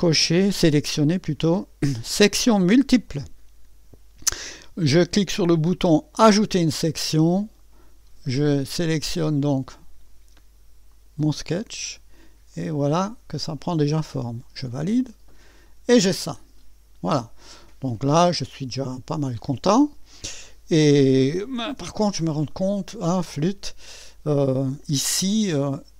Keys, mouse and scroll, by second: 2.7 click, 6.1 click, 10.9 click, 12.1-13.7 drag, 14.7 click, 15.7-18.1 drag, 18.6-20.5 drag, 21.4-22.3 typing, 22.5 right click.